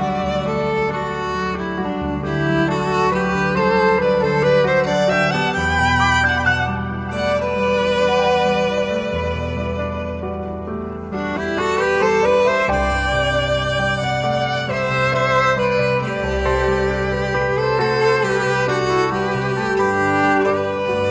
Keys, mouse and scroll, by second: 0.9 middle click, 1.0 scroll up 1, 1.1-1.5 scroll down 2, 1.2 middle click, 6.1-7.3 typing, 13.5 middle click, 19.7 middle click, 20.1 shift+a, 20.5 g.